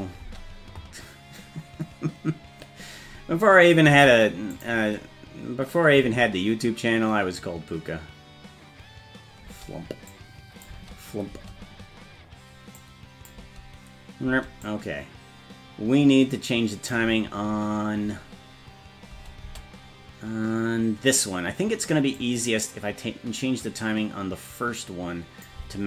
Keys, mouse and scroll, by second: 0.2 space, 3.9 space, 4.5 click, 6.0 space, 9.5 space, 10.1 click, 10.7 space, 11.3 space, 12.8 click, 13.4 space, 14.3 space, 14.6-16.9 drag, 19.1 space, 19.4 space, 22.2-25.5 drag.